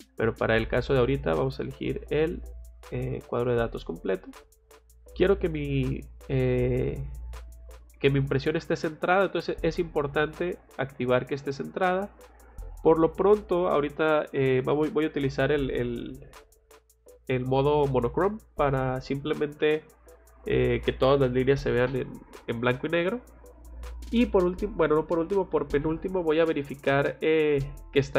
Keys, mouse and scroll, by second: 0.3 scroll down 2, 0.9 middle click, 2.2 click, 3.7 click, 9.2 click, 12.9 click, 18.6 click, 20.1 click.